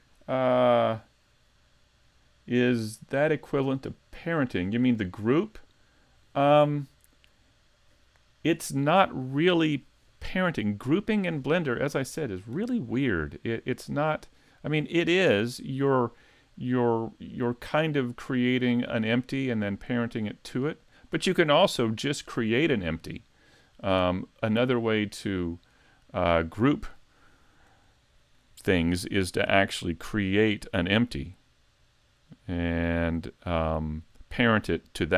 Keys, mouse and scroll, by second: 15.0 click, 20.9 click, 24.5 click, 26.6 scroll down 2, 28.1 shift+middle click, 28.7 middle click, 29.9 click, 31.9 click.